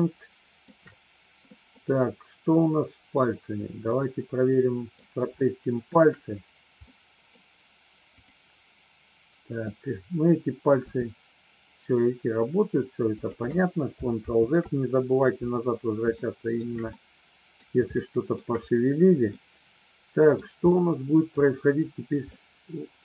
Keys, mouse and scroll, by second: 1.7-3.1 middle drag, 3.8-4.9 middle drag, 5.4 shift+middle click, 6.9 middle click, 10.8 r, 14.1 ctrl+z, 16.0 shift+middle click, 16.9 middle click, 17.9 shift+middle click, 19.1-20.4 middle drag, 20.8 middle click, 22.3-23.0 middle drag.